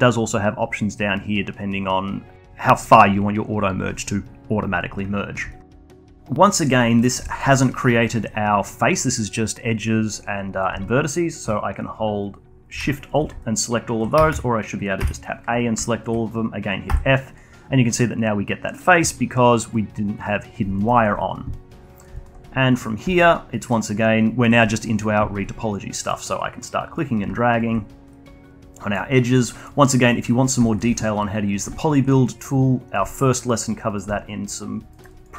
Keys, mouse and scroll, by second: 5.9 alt+click, 6.4 scroll down 1, 6.6-6.9 alt+middle drag, 6.9-11.5 alt+drag, 14.3 alt+shift+drag, 14.6 alt+click, 15.3 a, 15.5 a, 16.2 a, 17.0 alt+click, 18.0 f, 20.8 click, 21.4 click, 22.0 alt+middle click, 22.1-35.3 alt+drag.